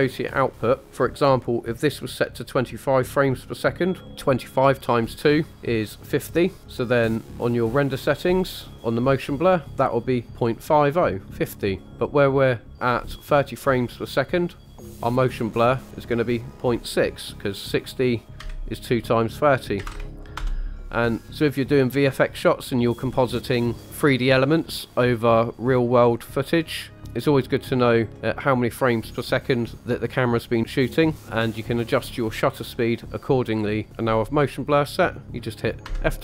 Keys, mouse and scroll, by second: 4.8 click, 8.0-8.4 scroll down 4, 11.8 scroll up 2, 12.3 click, 12.9-14.4 scroll up 1, 14.6 click, 14.8-16.5 scroll down 5, 16.5 click, 16.5 scroll down 1, 33.9-34.5 scroll down 1.